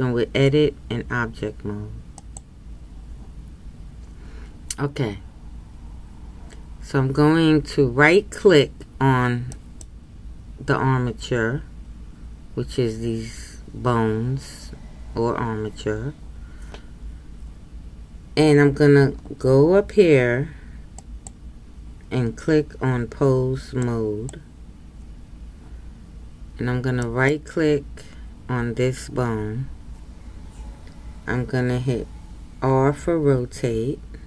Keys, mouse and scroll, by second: 2.3-9.6 drag, 9.6-24.4 right drag, 27.1-33.3 right drag, 33.3 r.